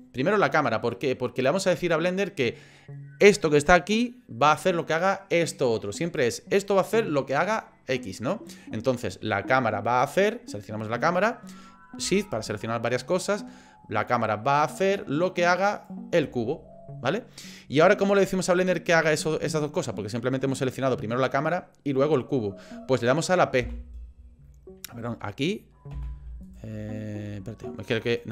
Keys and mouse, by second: 15.7 shift+click, 23.6 p, 25.9 p, 26.4 click, 28.2 click.